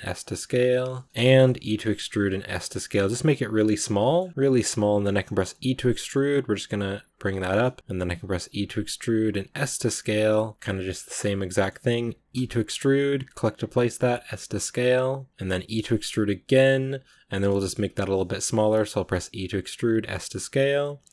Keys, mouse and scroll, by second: 1.1 shift+middle click, 1.3 scroll up 1, 1.5 e, 2.0 s, 3.9 shift+middle click, 4.0 scroll up 2, 4.3 s, 7.3 scroll down 1, 7.5 middle click, 7.7-8.3 scroll up 3, 8.3 e, 10.9 shift+middle click, 11.0 shift+right click, 11.3 middle click, 12.2 e, 16.9 middle click, 17.6-18.9 scroll up 2, 18.9 e.